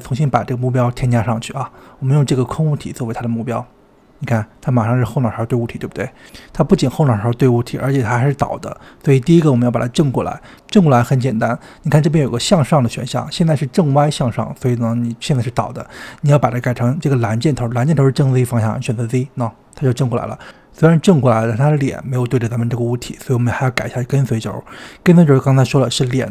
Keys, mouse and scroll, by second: 0.3-3.5 drag, 6.6 click, 8.5 click, 9.6 click, 13.1 click, 19.0 click, 21.6-24.7 middle drag.